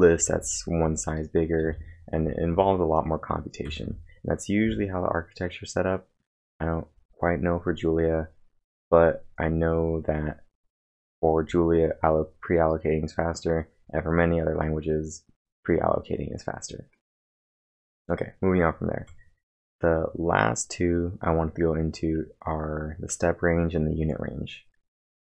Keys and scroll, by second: 0.0-2.5 typing.